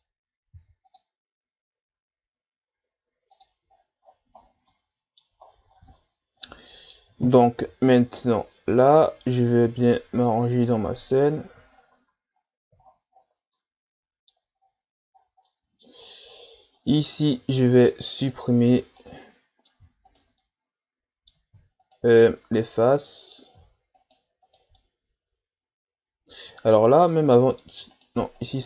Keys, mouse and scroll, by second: 0.5 ctrl+r, 3.7-4.4 ctrl+scroll down 10, 4.7 middle click, 5.5 ctrl+scroll down 1, 5.7-6.4 scroll up 9, 6.4-7.6 middle drag, 7.6 KP_3, 8.3-9.4 scroll down 6, 10.3 click, 10.9-11.8 scroll down 8, 11.8-12.8 shift+scroll up 6, 12.8-13.4 shift+scroll down 8, 13.5-14.6 middle drag, 14.6-15.2 scroll up 8, 15.2 scroll down 3, 15.5 middle click, 16.1 ctrl+scroll down 1, 16.3-16.8 scroll up 1, 16.8 middle click, 17.5 ctrl+Tab, 18.8 right click, 19.0-20.1 middle drag, 20.1 shift+right click, 20.4-21.8 middle drag, 21.8 shift+right click, 22.2-24.0 middle drag, 24.0 shift+right click, 24.8-27.9 middle drag, 27.9 shift+right click.